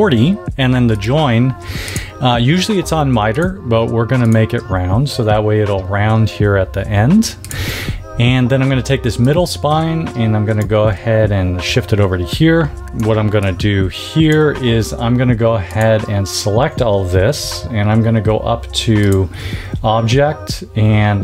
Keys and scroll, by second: 12.8 space.